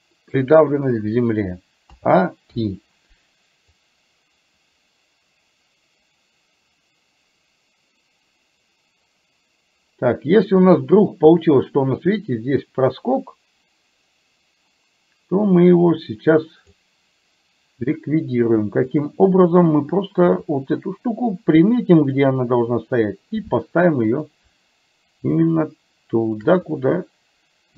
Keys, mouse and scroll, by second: 2.0 a, 2.6 i, 3.9-16.9 drag, 19.0 click, 20.4 r, 24.2 click, 25.5 shift+click, 26.7 click, 27.6-27.7 drag.